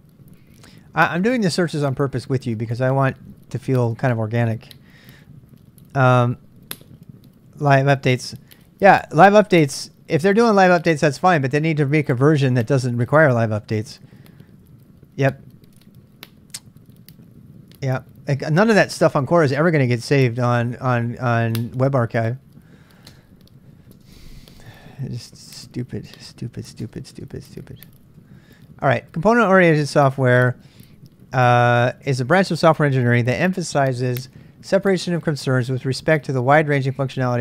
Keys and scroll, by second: 23.9 space, 26.8 space, 28.2 k.